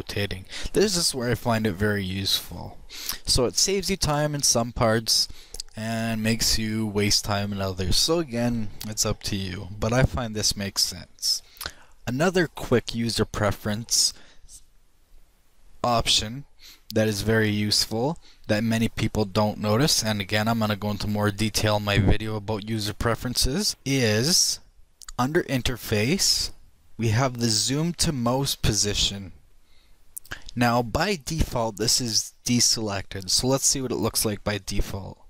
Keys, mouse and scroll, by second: 2.1-5.7 middle drag, 23.2 click.